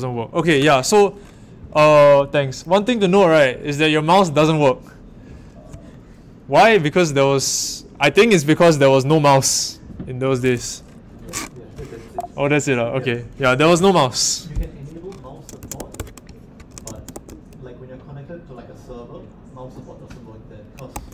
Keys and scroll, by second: 11.1 ↺, 15.3-17.6 typing, 20.9 shift+1.